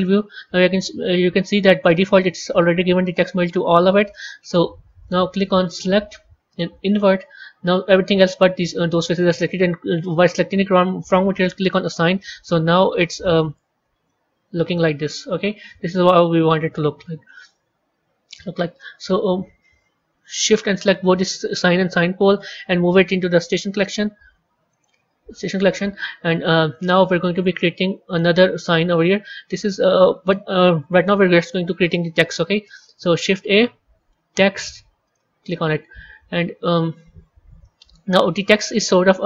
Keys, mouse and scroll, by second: 1.2-5.5 middle drag, 5.5-8.6 drag, 11.6 click, 13.5 Tab, 14.0-17.0 middle drag, 17.5 KP_3, 20.6 shift+click, 22.2 drag, 24.6 click, 26.4 a, 27.1 middle click, 28.0 click, 28.7-31.7 middle drag, 32.4 shift+a, 35.8-37.5 scroll up 13, 37.5-39.2 middle drag.